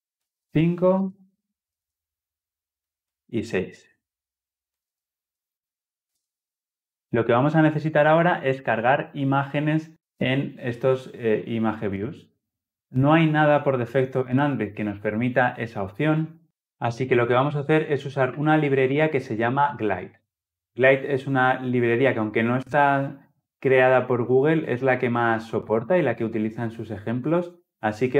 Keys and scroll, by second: 5.4 ctrl+v.